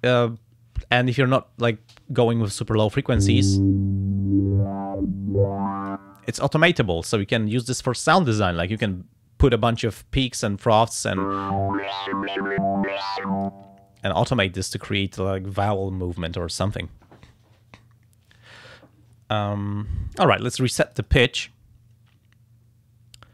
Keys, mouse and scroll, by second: 0.4-1.9 drag, 3.6-6.1 drag, 11.5-13.6 drag, 20.9 click.